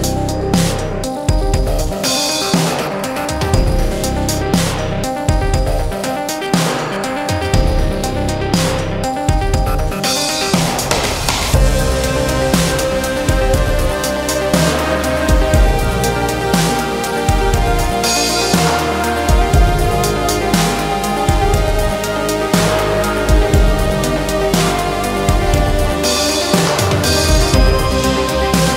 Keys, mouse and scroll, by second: 1.6 e, 4.0-6.5 middle drag, 8.5 scroll down 1, 8.8-10.6 middle drag, 10.6 click, 11.3-12.1 scroll up 1, 12.1 i, 12.9 i, 13.7 i, 15.2 click, 15.7 middle click, 16.5 click, 17.1-17.4 scroll up 2, 17.4 middle click, 18.1-18.8 scroll up 2, 18.8 middle click, 19.8-20.2 scroll down 4, 20.2 middle click, 20.6 ctrl+scroll up 1, 20.8 ctrl+r, 22.0-22.9 scroll up 3, 22.9 click, 23.3-23.9 scroll up 1, 23.9 ctrl+r, 25.3 ctrl+r, 26.8 middle click, 27.7 ctrl+r.